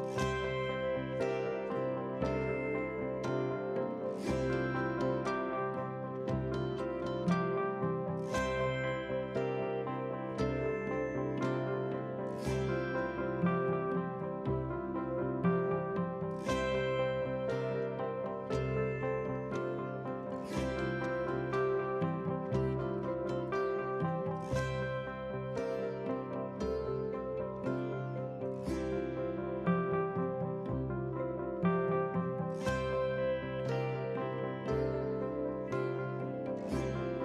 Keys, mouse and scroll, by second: 0.0 shift+d, 1.3 click, 2.1 ctrl+j, 2.5 click, 2.9 middle drag, 3.4 scroll up 4, 3.5 shift+middle click, 4.2 click, 5.7 r, 7.0 g, 7.7 KP_7, 8.4 s, 9.1 g, 10.2 s, 13.1-13.8 scroll up 1, 13.8 KP_1, 14.4 scroll up 3, 14.7 shift+middle click, 15.2 click, 15.5 g, 16.7 scroll down 1, 16.8 middle drag, 17.6 scroll down 1, 18.5-19.6 scroll down 1, 21.3 KP_3, 21.5 scroll up 2, 21.7 shift+middle click, 22.0 g, 23.9 Tab, 24.3 ctrl+r, 26.1 ctrl+r, 27.6 ctrl+r, 30.7 KP_7, 31.0 scroll down 2, 31.1 shift+middle click, 31.7 g, 32.7 shift+middle click, 33.0-33.5 scroll up 2, 33.5 alt+click, 33.8 g, 34.9-35.5 scroll down 1, 36.0 click, 36.3-36.7 middle drag.